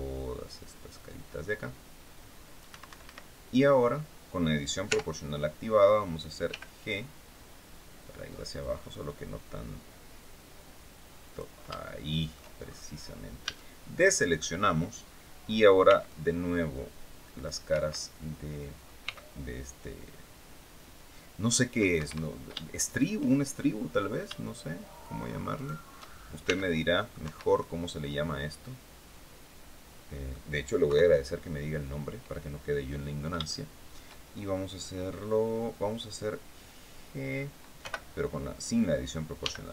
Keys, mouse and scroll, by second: 2.4 Escape, 3.4-3.7 scroll down 2, 4.5 o, 4.9-5.3 scroll up 2, 6.1 g, 7.9-8.9 scroll up 2, 10.9 click, 11.4 shift+click, 12.3-12.6 shift+scroll up 3, 13.1 a, 15.5 c, 15.7-17.3 drag, 17.4 Escape, 18.7 c, 19.5-21.4 drag, 21.6 Escape, 22.5 shift+right click, 23.2 shift+middle click, 25.2 shift+right click, 26.1 shift+c, 26.2 click, 26.9 Escape, 27.2-30.1 drag, 30.5 KP_3, 32.6 scroll down 2, 33.1 shift+middle click, 37.4 o, 39.0 g.